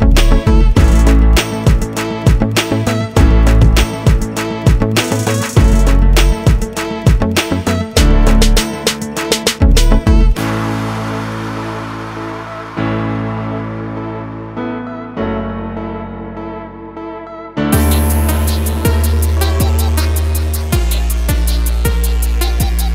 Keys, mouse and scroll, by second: 0.4 click, 1.6 scroll up 1, 2.2 scroll down 1, 3.0 ctrl+click, 4.5 click, 4.9 double click, 5.9 ctrl+click, 7.0 click, 7.3 double click, 7.8 scroll down 1, 8.4 scroll up 1, 10.0 F4, 14.2 click, 17.1 scroll down 1, 21.3 scroll down 1.